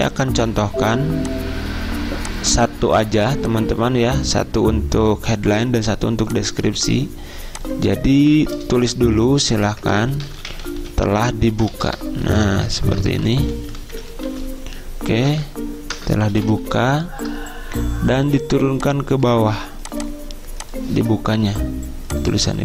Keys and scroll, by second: 0.9 z, 3.2 z, 9.0 Caps_Lock, 10.3-13.0 typing, 14.2-15.4 typing, 18.9-19.6 typing.